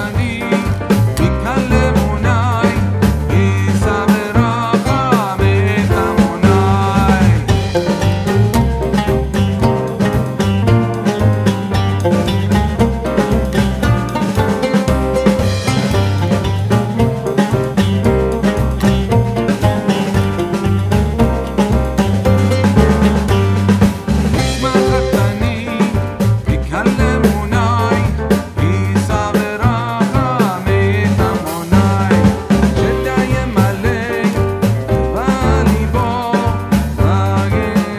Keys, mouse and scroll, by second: 0.8-2.7 drag, 7.2 click, 12.5 click, 14.6 click, 15.1 shift+click, 17.0 typing, 19.8-24.4 drag, 27.9 click, 37.2-37.9 drag.